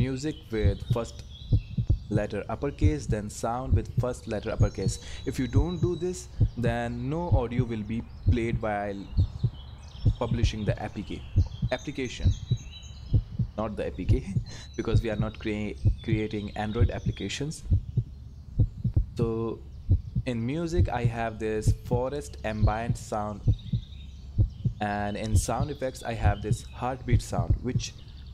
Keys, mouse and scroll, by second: 3.2 click, 18.0 click, 21.4 click.